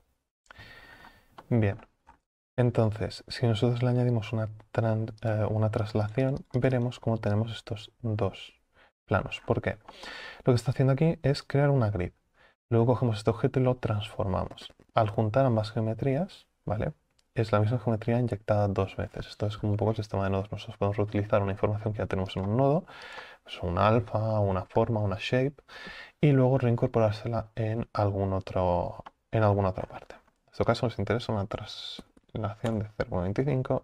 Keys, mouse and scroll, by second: 0.0 click, 6.0-20.4 drag, 20.4 ctrl+z, 32.8-33.8 drag.